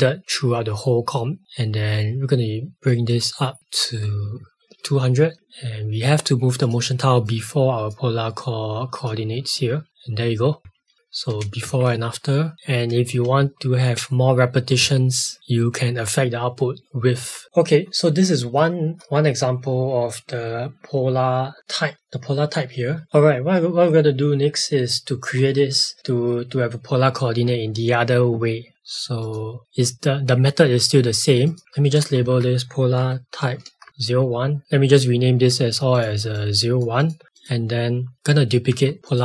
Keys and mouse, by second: 2.8 click, 4.3 shift+Up, 5.3 click, 12.5 click, 17.4 ctrl+s, 23.0 click, 31.4 click.